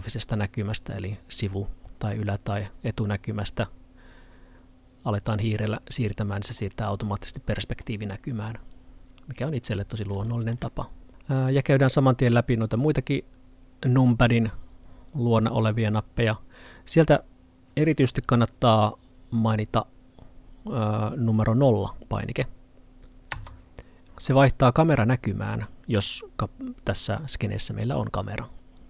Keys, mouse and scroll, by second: 5.8 middle click.